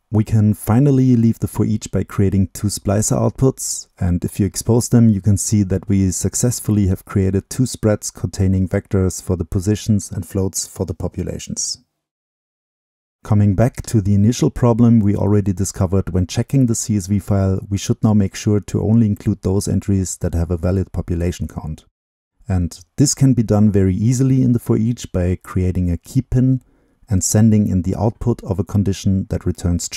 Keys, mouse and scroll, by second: 0.5 middle click, 0.9-2.2 drag, 2.2-3.3 right drag, 3.3-5.0 drag, 5.0 right drag, 5.2-6.1 scroll down 2, 6.1-7.3 drag, 7.3-9.1 middle drag, 9.1-11.2 drag, 11.2-12.3 middle drag, 12.3-13.0 scroll up 2, 13.0-13.5 drag, 13.5-15.9 right drag, 13.5 scroll up 2, 15.9 click, 22.4-24.6 drag, 25.4 click, 26.2 shift+click, 26.9 click, 27.9-29.9 drag.